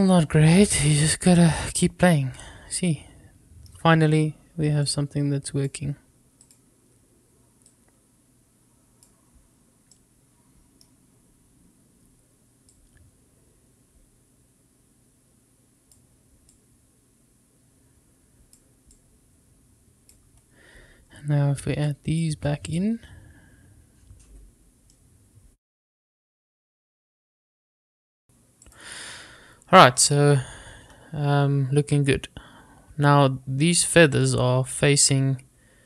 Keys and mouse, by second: 1.8-3.8 middle drag, 4.8-6.5 drag, 7.7-9.0 drag, 9.9-10.9 middle drag, 12.8-15.9 drag, 16.5-18.5 drag, 18.9-20.1 drag, 21.9 click, 24.9-28.2 middle drag, 28.3 drag.